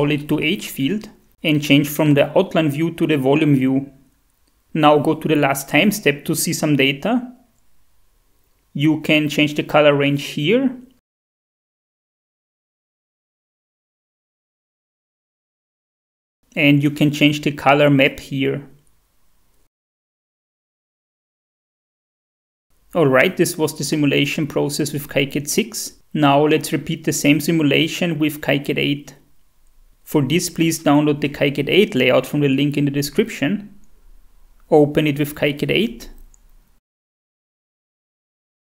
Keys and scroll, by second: 4.9 shift+F5, 5.7 shift+F4, 11.5 Tab, 11.9-13.4 typing, 13.2 Tab, 29.1 Tab, 29.1 Delete, 29.1 F4.